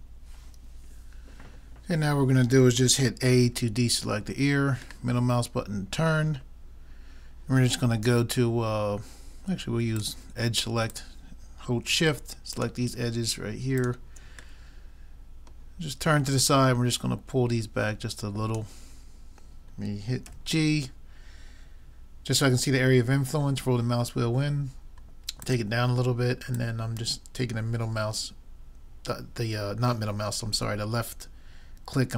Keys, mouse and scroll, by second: 3.6 a, 5.1 middle click, 10.0-13.7 drag, 18.9-20.7 middle drag, 20.3 g, 21.2 middle click, 26.6-28.4 drag.